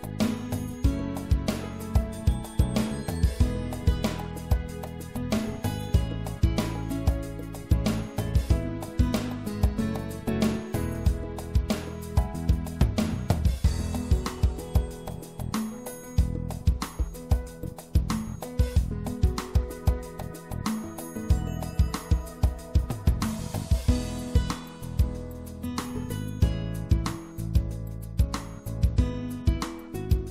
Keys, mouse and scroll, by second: 3.8-5.8 middle drag, 5.8-7.0 drag, 7.0 w, 8.2-10.0 drag, 9.0-10.1 right drag, 10.1-16.3 drag, 12.8 right click, 14.5 right click, 15.2 w, 16.4 w, 17.2 w, 20.2 click, 20.8 middle click, 21.0 middle click, 22.6 middle click, 22.6 c, 23.6-27.5 drag, 24.3 c.